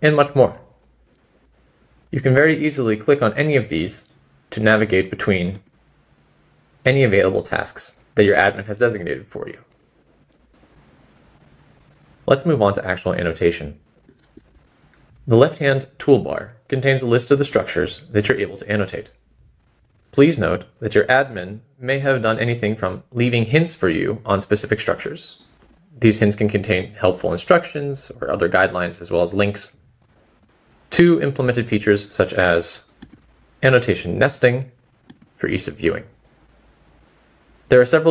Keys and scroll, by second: 2.1 typing, 5.9-7.5 typing.